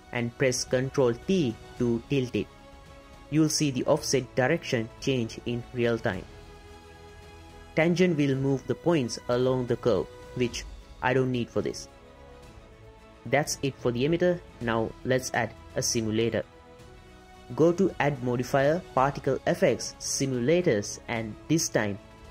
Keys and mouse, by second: 1.1-3.0 drag, 4.8 click, 7.1 click, 8.3-12.4 drag, 13.4-14.7 drag, 16.0 click, 16.8 click, 18.0-22.3 drag.